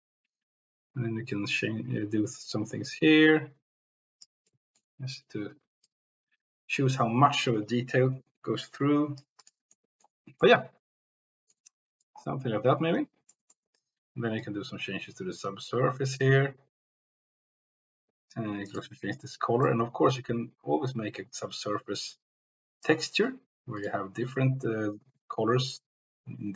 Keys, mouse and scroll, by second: 4.4 middle click, 9.7-10.0 drag, 10.6-11.7 drag, 11.8 shift+click, 13.3 middle click, 14.4-18.3 drag, 18.7 click, 23.8 click.